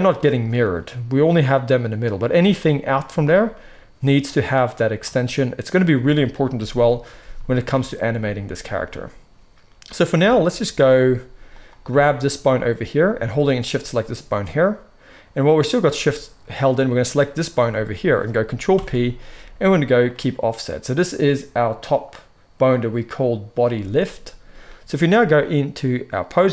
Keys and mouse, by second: 6.6 KP_3, 11.5-16.6 shift+middle drag, 16.6 shift+click, 16.7-20.8 shift+middle drag, 18.6 ctrl+p, 20.8 click, 21.7-25.4 middle drag, 25.4-26.5 drag.